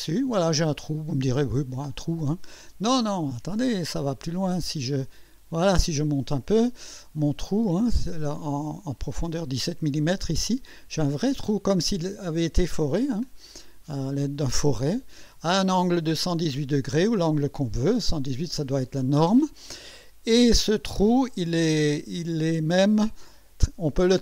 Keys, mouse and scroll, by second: 1.2 scroll up 2, 1.6 scroll down 1, 2.2 click, 3.8 scroll down 2, 4.3-5.1 scroll down 3, 5.3 scroll down 1, 6.0-8.0 drag, 8.4-9.1 drag, 9.7-10.5 drag, 10.7-11.2 scroll up 2, 11.9-13.2 drag, 14.0 scroll up 1, 14.6-15.5 drag, 20.7 click.